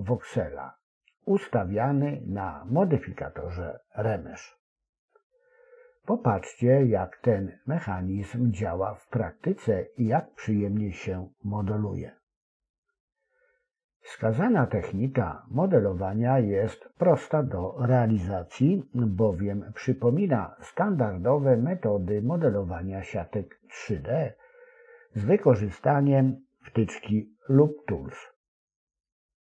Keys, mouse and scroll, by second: 0.5 click, 1.6 s, 2.1 s, 3.0 g, 4.9 ctrl+r, 6.6 s, 7.7 g, 11.1 click, 11.6 click, 12.0 click, 12.4 click, 15.3 e, 17.2 s, 18.0 ctrl+r, 20.5 Tab, 22.0 click, 24.3 click, 25.9-27.4 drag, 28.6 click.